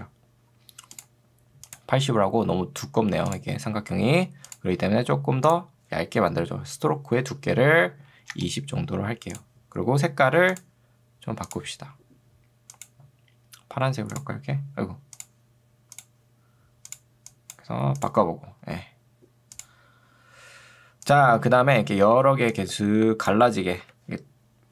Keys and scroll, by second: 8.0 0, 8.4 Return, 22.2 ctrl+2, 23.8 Escape.